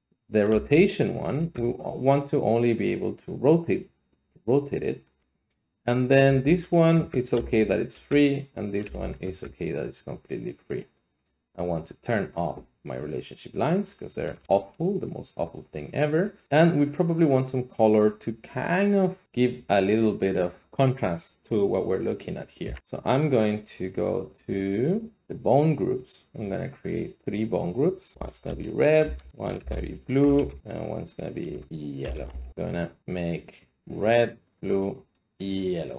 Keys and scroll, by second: 0.5 r, 1.3 Escape, 6.2 g, 6.9 Escape, 7.3 r, 7.9 Escape, 8.8 g, 13.2 Escape, 14.7 alt+z, 22.6 a, 28.1-30.4 typing, 29.2 Return, 30.6 Return, 31.7 ctrl+a, 32.0-32.4 typing.